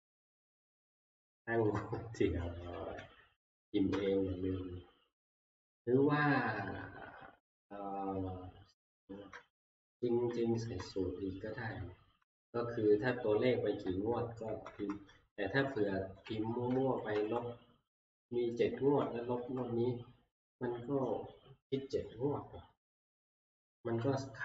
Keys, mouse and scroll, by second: 1.7 click, 2.8 3, 3.9 Return, 5.8 click, 9.7 Right, 9.7 click, 10.3 Right, 10.8 ctrl+Right, 11.4 Right, 12.2 Left, 13.1 Right, 13.4 Right, 13.5 Right, 13.8 Right, 14.4 Left, 14.8 Left, 15.1 Right, 15.3 Right, 15.6 Right, 16.1 Left, 17.2 Right, 17.2 Left, 17.2 3, 18.8 Right, 23.3 Left.